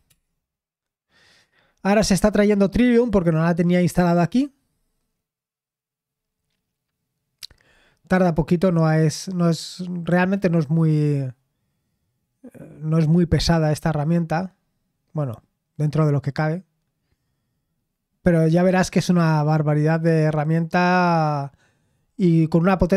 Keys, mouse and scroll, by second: 2.4 typing.